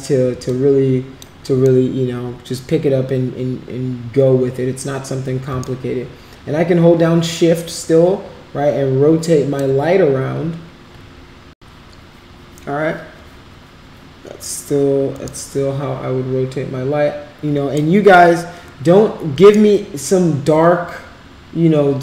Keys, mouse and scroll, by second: 0.5 alt+click, 1.6 middle click, 5.8-9.6 shift+right drag, 15.4-17.8 shift+right drag, 19.6-22.0 shift+right drag.